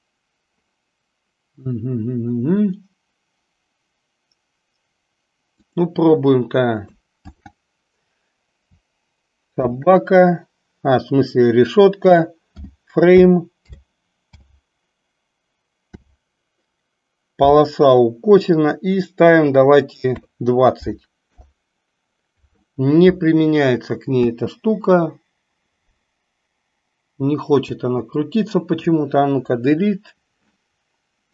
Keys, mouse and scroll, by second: 5.5-21.5 drag, 24.2 space, 27.7 space, 29.4 Delete.